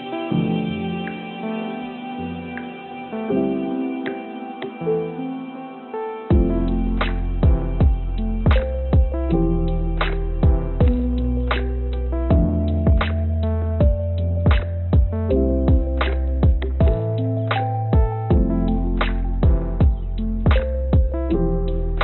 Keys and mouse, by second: 0.7 g, 2.5 g, 4.8 click, 5.0 click, 6.1 g, 10.5 g, 13.0 g, 19.2 g.